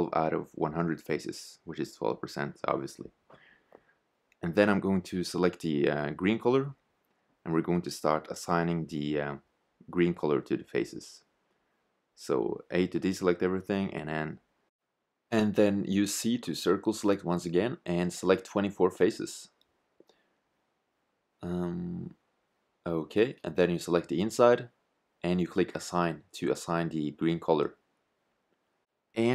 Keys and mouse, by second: 7.1 shift+z, 11.7 a, 12.7 c, 24.6-28.5 drag, 29.2 shift+z.